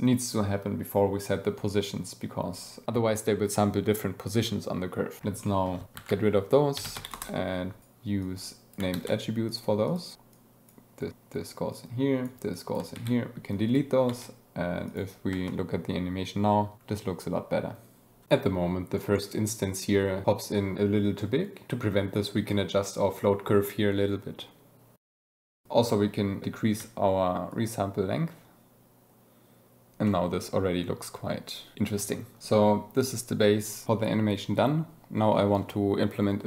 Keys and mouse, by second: 5.3 click, 6.0 shift+a, 8.1 click, 8.8 shift+d, 9.4 click, 9.8 click, 10.1 ctrl+z, 10.2 click, 11.6-12.2 drag, 12.5 click, 12.9 ctrl+x, 13.5 click, 14.0 g, 14.8 click, 15.2 space, 18.2 space, 18.2 space, 18.5 shift+drag, 19.0 shift+click, 19.8 shift+click, 21.0 space, 21.5 space, 21.8 space, 24.5-25.6 drag, 25.6 space, 27.5-29.9 shift+drag.